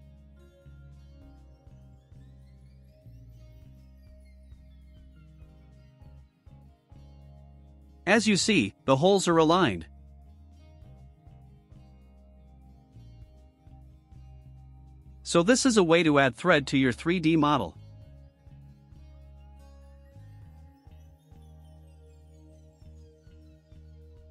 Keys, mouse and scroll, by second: 0.8 click, 1.3 click, 2.2 click, 2.7 click, 3.8 click, 4.2 5, 4.6 0, 5.9 click, 6.6 click, 7.1 click, 8.4 click, 9.0 scroll up 1, 11.5-12.0 scroll down 3, 12.8 click, 13.5 click, 13.9 scroll down 1, 15.3 click, 15.7 click, 16.6-22.5 drag.